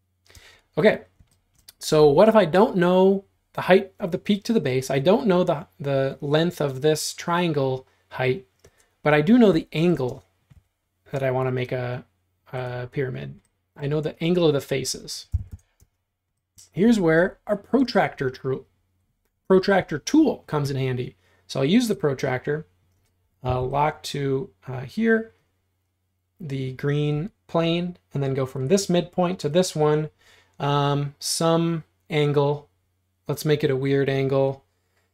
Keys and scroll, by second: 0.4 space, 10.6 r, 15.0-16.0 typing, 23.5 BackSpace.